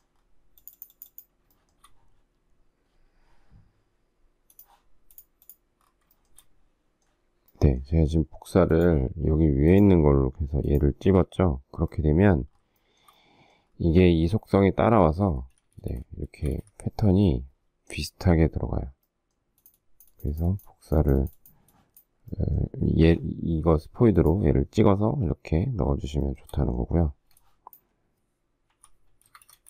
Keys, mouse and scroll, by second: 1.5 shift+middle click, 6.1 shift+middle click, 12.8 shift+middle click, 15.2 space, 15.4 Escape, 16.3 Escape, 16.5 space, 19.7 click, 26.3 shift+middle click, 27.1 space, 28.7 h, 29.3 space, 29.4 Escape.